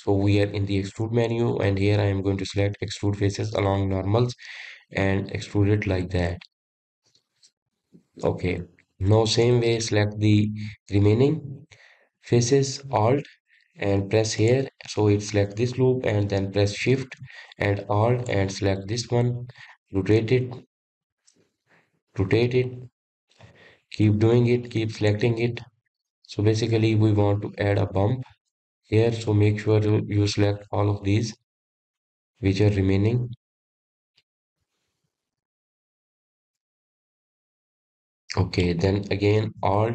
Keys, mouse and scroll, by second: 0.9 alt+e, 9.8 middle click, 10.7 click, 15.7 alt+click, 19.5 alt+shift+click, 20.2-21.8 middle drag, 21.8 alt+shift+click, 22.3 alt+shift+click, 22.7-23.9 middle drag, 23.9 alt+shift+click, 24.4 alt+shift+click, 24.8-25.9 middle drag, 25.9 alt+shift+click, 26.3 alt+shift+click, 26.8-29.4 middle drag, 29.4 alt+shift+click, 30.0-31.8 middle drag, 31.8 alt+shift+click, 32.3 alt+shift+click, 32.7-34.5 middle drag, 34.5 alt+shift+click, 35.0 alt+shift+click, 35.3-36.8 middle drag, 36.8 alt+shift+click, 37.6 alt+shift+click, 38.1-39.9 middle drag.